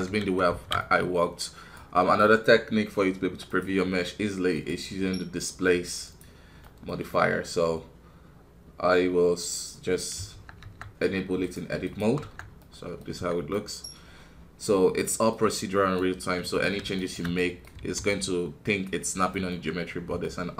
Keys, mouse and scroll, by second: 0.0 KP_1, 0.5 alt+a, 0.8-4.5 middle drag, 4.5-6.6 drag, 6.6-13.1 middle drag, 13.1 Tab, 13.5-15.9 middle drag, 15.9-17.3 right drag, 17.3 middle click, 17.7 e, 19.5-20.5 middle drag.